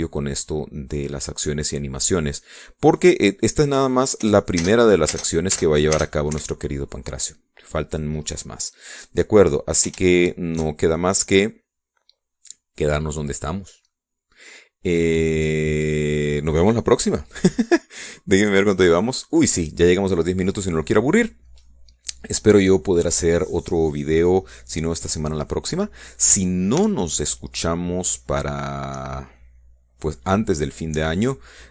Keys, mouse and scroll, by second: 1.9-4.2 drag, 5.3 p, 5.7 space, 7.4 Escape, 19.8 click, 20.4 click.